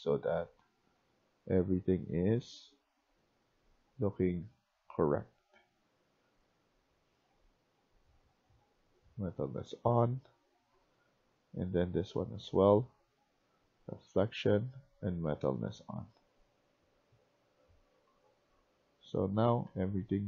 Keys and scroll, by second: 0.0-20.2 typing.